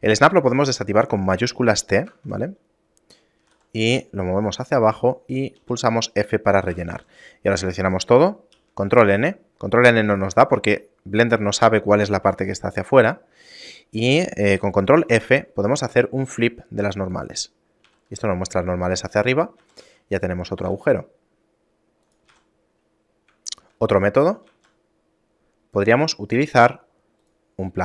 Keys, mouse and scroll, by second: 2.2 shift+Tab, 3.5 g, 5.7 f, 6.2 shift+middle click, 6.8 a, 7.0 a, 8.6 ctrl+n, 10.6 shift+middle click, 12.7 shift+middle click, 15.1 ctrl+f, 18.0 a, 18.2 Tab, 18.4 scroll up 2, 19.0-19.4 scroll down 2, 19.4 scroll down 2, 19.7 a, 19.9 a, 20.7 g, 22.4 a, 22.8-23.4 scroll up 2, 23.6 shift+middle click, 24.0 middle click, 24.6 shift+a.